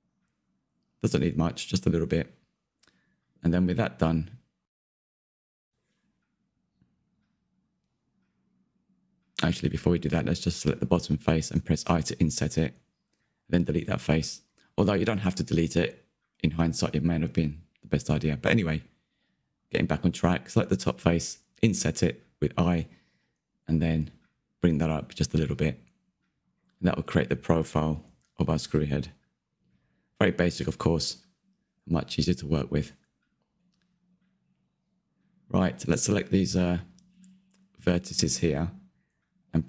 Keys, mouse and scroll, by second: 6.3-10.5 shift+middle drag, 10.5 click, 11.6 i, 14.4 Delete, 14.7-15.9 middle drag, 15.9 click, 16.6-20.5 middle drag, 27.4-29.3 middle drag, 29.3 click, 33.5-36.1 middle drag, 36.1 alt+click, 38.5 1, 38.7 click.